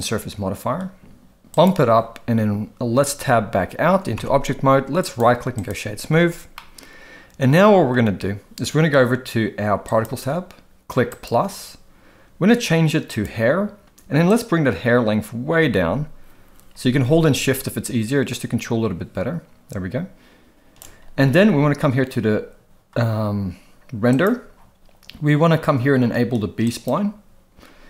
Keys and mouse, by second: 1.6 click, 4.2 Tab, 5.0-5.7 right drag, 6.6-7.9 middle drag, 9.9 click, 11.1 click, 13.1 click, 14.4-20.8 drag, 24.1 click, 26.7 click.